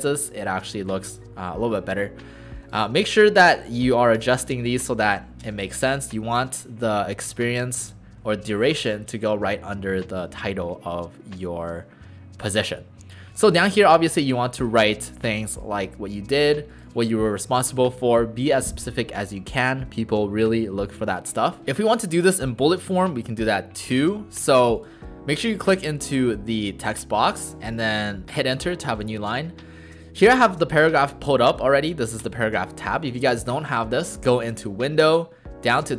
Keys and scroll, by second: 1.6 Down, 26.9 Return.